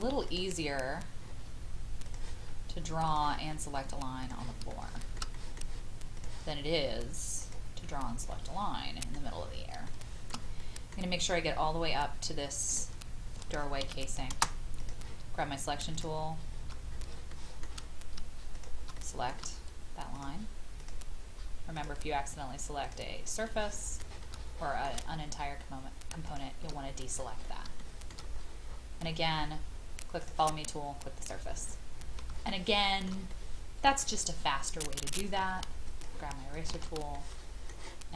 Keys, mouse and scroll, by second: 0.3 click, 0.8 scroll up 1, 2.0 click, 4.7 shift+middle click, 5.3 middle click, 7.2 click, 8.3 middle click, 9.4 scroll up 1, 9.9 shift+middle click, 12.7 click, 13.8 Escape, 14.8 click, 15.9 shift+click, 16.9 scroll down 1, 17.3 shift+middle click, 18.5 shift+click, 18.9 middle click, 20.1 shift+click, 20.8 shift+click, 21.7 shift+click, 22.8 shift+click, 23.4 shift+middle click, 24.2 shift+middle click, 26.2 shift+click, 26.8-27.6 scroll down 1, 27.8 shift+middle click, 28.3-30.2 scroll up 1, 30.2 click, 31.6-32.2 scroll down 1, 32.5 shift+middle click, 33.3-35.4 middle drag, 35.4 e, 35.9 shift+click, 36.5 shift+click, 37.1 shift+middle click.